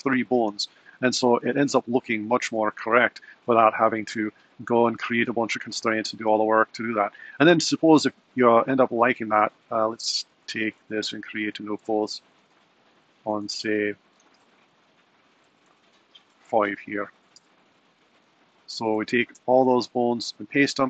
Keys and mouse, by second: 0.6 r, 1.7 r, 3.2 r, 6.4 r, 10.0 a, 10.2 super+c, 11.0 shift+Right, 11.9 shift+Left, 12.1 Right, 12.3 Right, 12.4 Right, 12.5 Right, 14.5 Right, 15.5 Left, 15.7 Left, 16.1 Right, 17.6 super+v, 18.9 a, 19.2 i.